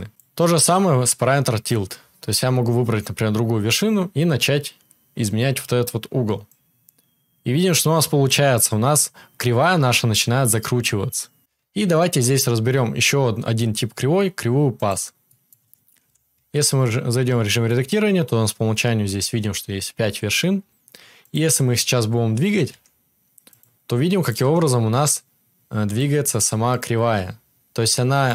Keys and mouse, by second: 15.4-19.0 right drag, 16.0 KP_7, 16.3 Tab, 21.1 click, 22.6-28.3 right drag, 22.6 g, 24.3 g, 26.9 g.